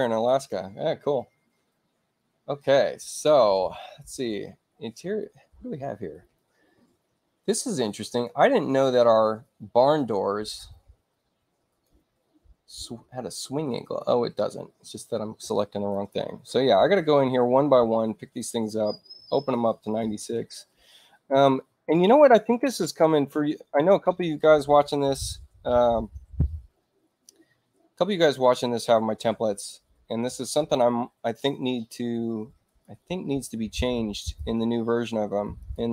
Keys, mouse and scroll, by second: 11.6 click, 13.8 click, 15.8 click, 18.3 click, 19.9 6, 20.3 Return, 28.1 click, 32.6 ctrl+click, 34.1 click, 35.0 space, 35.5 click.